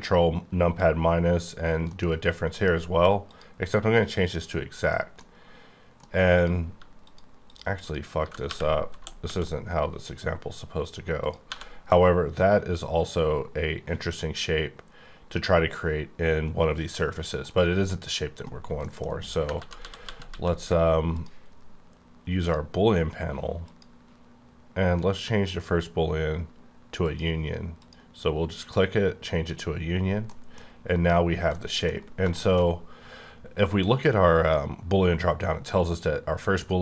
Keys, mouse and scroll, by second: 1.6 scroll down 1, 1.9 middle click, 2.5 F9, 3.2 click, 4.1 click, 5.2 middle click, 6.3 click, 7.0 click, 7.5 click, 7.8 click, 8.2 g, 8.5 y, 9.2 x, 11.1 click, 11.5 1, 11.7 scroll down 2, 11.8-17.5 middle drag, 17.5-18.7 scroll up 1, 18.7 middle click, 19.1-19.5 scroll down 1, 19.6 ctrl+z, 19.7 ctrl+z, 20.0 ctrl+z, 20.2 ctrl+z, 21.0 click, 22.4 click, 23.6 click, 25.5 click, 27.0 click, 30.3 middle click, 30.6 scroll up 2, 31.5 middle click, 31.9 scroll up 3, 32.3 shift+middle click, 32.7 scroll up 2, 34.4 click.